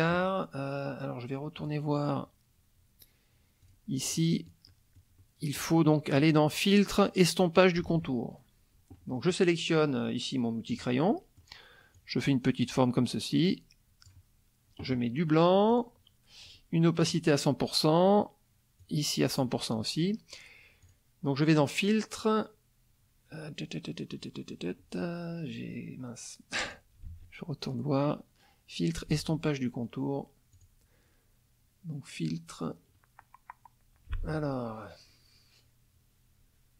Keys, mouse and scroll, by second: 1.6 click, 4.1-5.8 drag, 5.9 click, 8.0 alt+Tab, 10.7 click, 11.1 middle click, 11.9-14.3 drag, 15.7 click, 16.5 right click, 17.0 click, 18.8 click, 20.8 click, 26.6 click, 27.1 alt+Tab, 29.2 alt+Tab, 30.6 click.